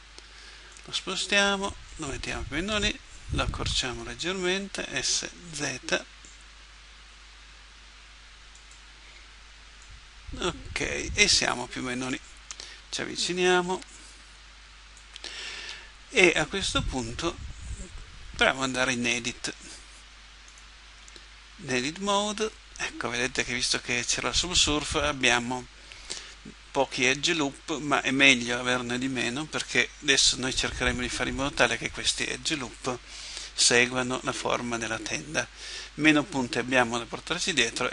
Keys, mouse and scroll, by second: 0.7-3.5 drag, 3.5 s, 9.8 click, 13.9-15.7 middle drag, 20.5-22.3 drag.